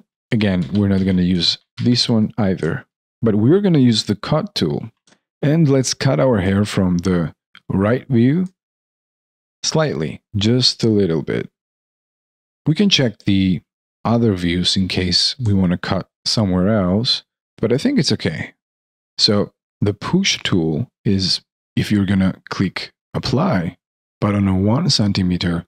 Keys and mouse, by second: 0.1 ctrl+z, 2.6 ctrl+z, 3.0 ctrl+y, 3.0 alt+click, 4.9 ctrl+z, 5.1 alt+middle click, 6.3 alt+middle click, 8.6 alt+middle click, 15.4 alt+right click, 16.1 alt+middle click, 17.4 alt+click, 19.6 alt+click, 21.6 alt+middle click.